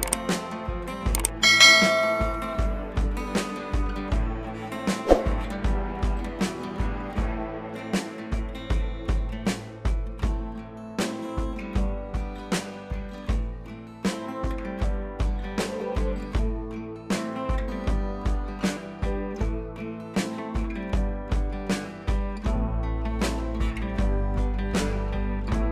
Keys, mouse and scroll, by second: 1.5 click, 3.9 scroll up 1, 4.1 scroll down 1, 6.5-7.9 drag, 8.1-8.8 click, 9.0 ctrl+t, 9.7-10.4 click, 10.6 click, 24.6 click.